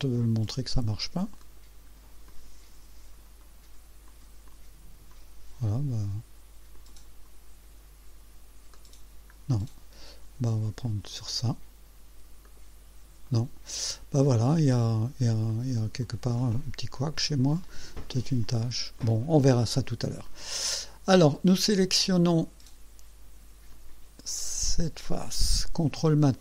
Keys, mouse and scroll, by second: 1.6 click, 2.3-4.1 drag, 3.5 right click, 4.2 click, 4.7 click, 6.8 click, 8.8 middle click, 9.6 click, 10.9 click, 12.5 middle click, 13.3 right click, 13.9-14.7 drag, 14.8-15.5 right drag, 15.5 click, 16.1 click, 17.7 click, 18.5 click, 19.0 click, 20.3-20.9 drag, 21.4 click, 22.4 right click, 23.8 click, 24.3-26.0 drag.